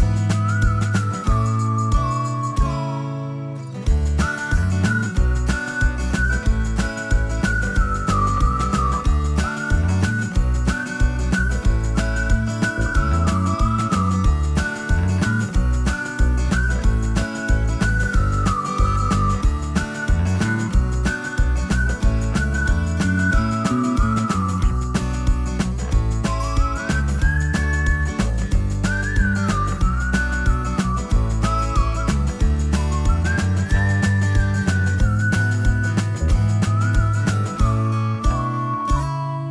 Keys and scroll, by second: 4.5 o, 9.0 space, 10.4 o, 13.3-14.9 typing, 16.5 ctrl+g, 18.3-20.1 typing, 20.2 Escape, 24.0 m, 31.9 shift+space, 34.4 Escape.